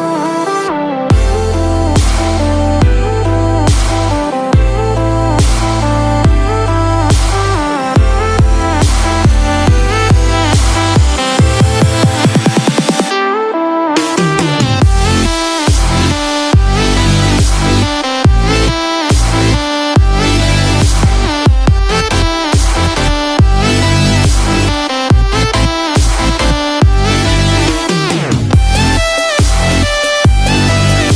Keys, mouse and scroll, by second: 4.6 ctrl+middle click, 11.4 shift+middle click, 14.8 middle click, 15.9 shift+middle click, 18.7 middle click, 20.6 shift+middle click, 25.2 click.